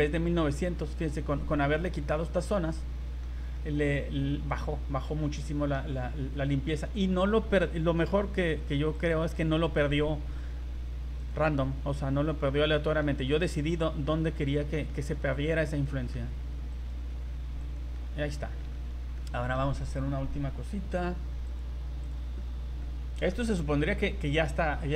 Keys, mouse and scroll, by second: 1.7 middle click, 3.1 middle click, 3.6 middle click, 5.2 middle click, 5.6 middle click, 6.2 middle click, 8.0 v, 9.0 right click, 9.5 middle click, 11.2 right click, 11.6 middle click, 14.2 middle click, 14.5-14.8 scroll down 3, 14.9 middle click, 15.4 scroll up 1, 15.8 middle click, 16.7 right click, 17.6 right click, 17.9 middle click, 18.3 scroll down 1, 18.6 middle click, 18.7 z, 19.2 middle click, 19.5 middle click, 21.4 click, 22.8 middle click.